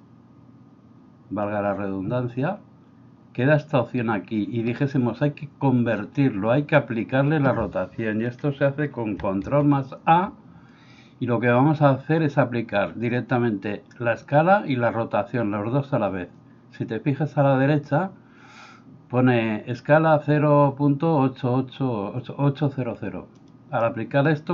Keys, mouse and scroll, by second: 9.8 ctrl+a.